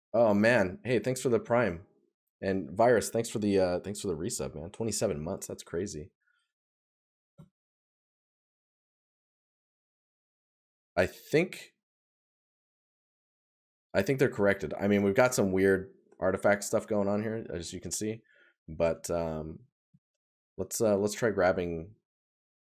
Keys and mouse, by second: 12.7 right click, 14.5 right click, 18.6 right click.